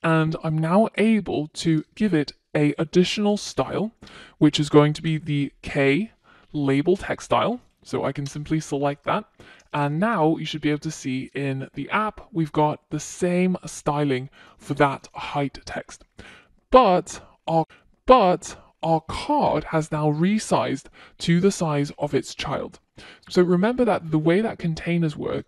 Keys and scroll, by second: 4.4 Return, 8.5 Return, 9.8 Return, 10.0 super+s, 11.7 super+s.